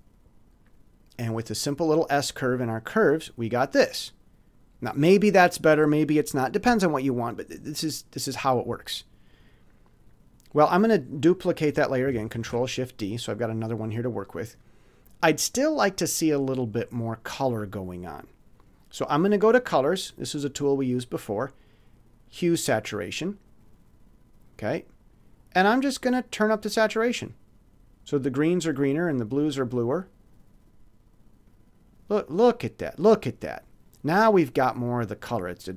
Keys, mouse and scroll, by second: 1.1 click, 12.4 ctrl+shift+d, 19.7 scroll up 1, 23.2 click, 26.7 click, 28.6 click, 29.8 click, 31.5 click, 33.9-35.7 drag.